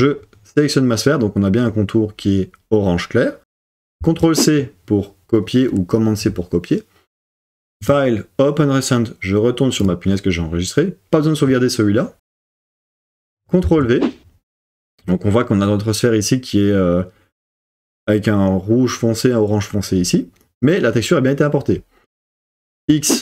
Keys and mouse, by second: 0.0-3.6 drag, 4.0 super+c, 7.9-12.6 drag, 13.6 super+v, 22.8 x.